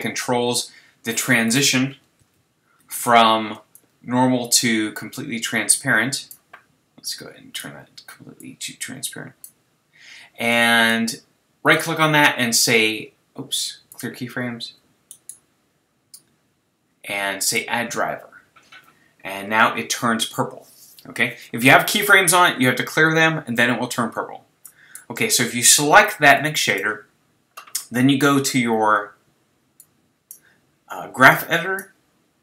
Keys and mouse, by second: 1.9 click, 2.2 shift+z, 7.1 click, 24.7-28.3 drag, 29.8 click, 31.6-32.4 drag.